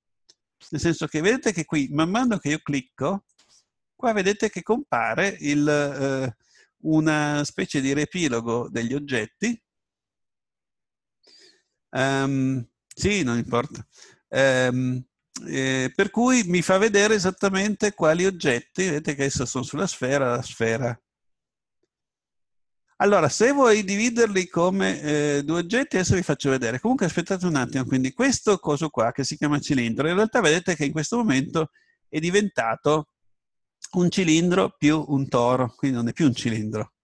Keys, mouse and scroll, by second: 2.1-5.1 right drag, 16.3-20.2 right drag, 28.3 right click.